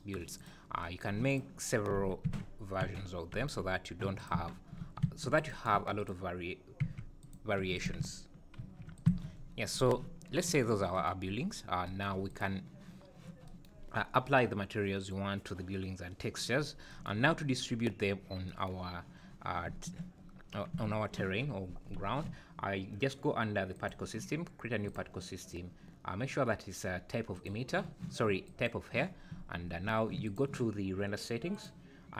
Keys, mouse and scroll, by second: 0.4 click, 1.3 click, 2.3 shift+d, 4.4 Tab, 5.0 ctrl+r, 5.8 3, 6.0 click, 6.8 e, 7.6 2, 7.8 click, 8.6 ctrl+b, 9.1 Tab, 9.3-9.7 scroll down 6, 10.5 `, 11.5 scroll up 2, 12.3 click, 16.6 scroll down 2, 17.7-18.5 scroll up 2, 19.7 `, 20.7 `, 23.7 click, 24.9 click, 28.6 click, 28.8 click, 30.2 click, 31.6 click.